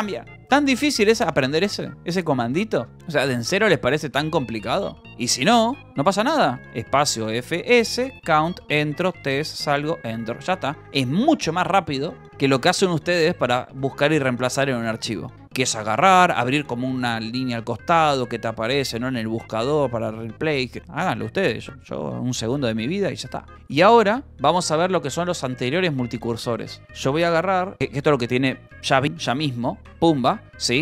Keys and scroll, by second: 0.0 Escape, 0.6 u, 3.8-6.0 typing, 7.1 space, 7.1 f, 7.4 s, 8.0 Return, 8.9 t, 9.3 Escape, 9.5 Return, 10.6 j, 14.4 Escape, 14.6 k, 15.1 u, 16.2 space, 16.7 e, 20.7 space, 20.8 Escape, 21.6 space, 22.0 e, 23.6-25.6 typing, 24.7 Escape, 30.4 shift+n.